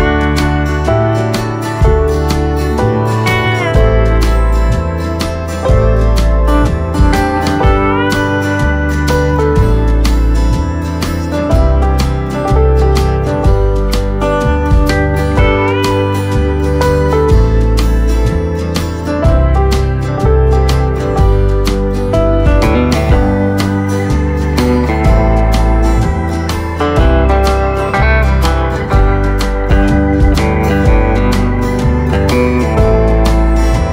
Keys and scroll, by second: 22.5 Delete.